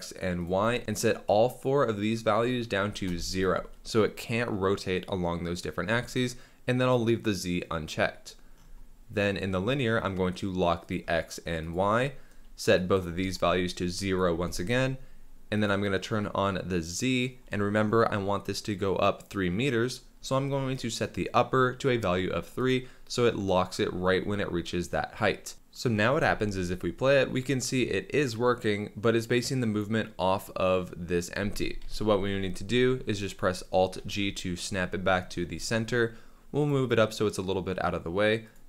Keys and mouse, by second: 0.4 click, 0.9-3.3 drag, 10.8 click, 11.6 click, 12.8 click, 14.0 click, 15.5 click, 21.1-22.6 drag, 26.1 space, 31.3 space, 31.8 KP_7, 33.9 alt+g, 34.8-35.5 middle drag, 35.5 g, 35.6 z.